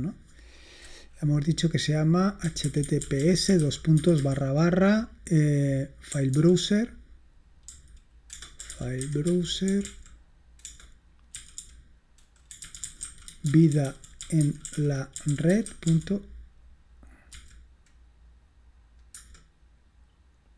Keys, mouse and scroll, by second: 0.0 click, 2.2-4.9 typing, 6.2 typing, 7.5-17.4 typing, 19.3 Return.